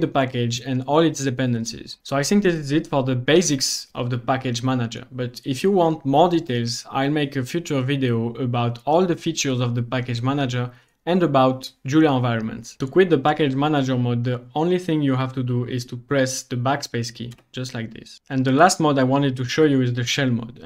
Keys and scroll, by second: 17.4 BackSpace.